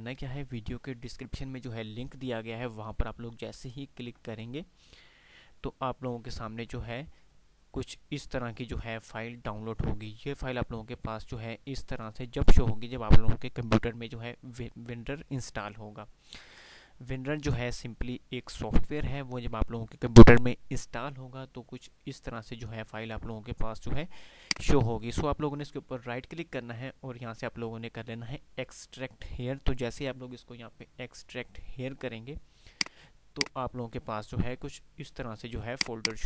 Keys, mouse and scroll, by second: 3.4 F5.